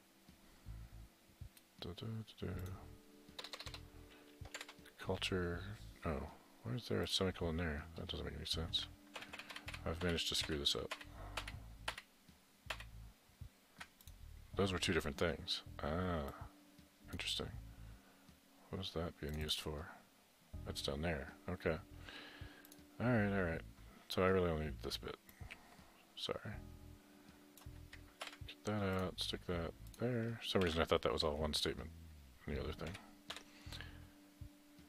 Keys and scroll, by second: 3.4 BackSpace, 3.5 BackSpace, 3.7 BackSpace, 4.5 BackSpace, 9.2 ctrl+z, 28.2 ctrl+x, 30.6 ctrl+v, 32.8 End, 33.4 typing.